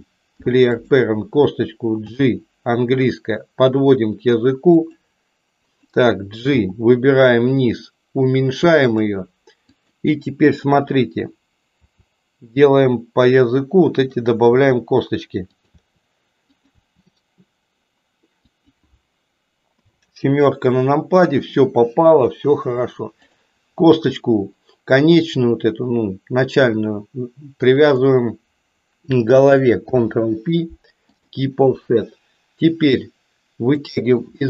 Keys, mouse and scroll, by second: 2.1 g, 5.7 click, 6.6 g, 9.8 click, 11.8 e, 14.6 e, 19.7 KP_7, 27.4 shift+click, 29.7 ctrl+p, 33.7 click.